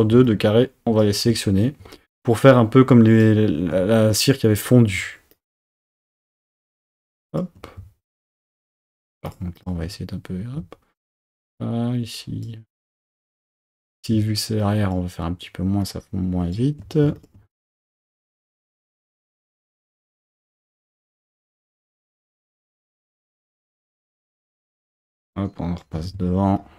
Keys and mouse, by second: 0.2 shift+click, 2.4-3.5 shift+drag, 5.4 shift+click, 7.0 shift+click, 8.3 shift+click, 9.3 shift+click, 11.2 shift+click, 12.2 shift+click, 13.4 shift+click, 14.6 shift+click, 16.0 shift+click, 17.2 shift+click, 18.1 shift+click, 19.2-20.9 shift+drag, 21.8 shift+click, 22.1 shift+click, 22.6 shift+click, 23.8 shift+click, 25.1 shift+click, 26.6 shift+click.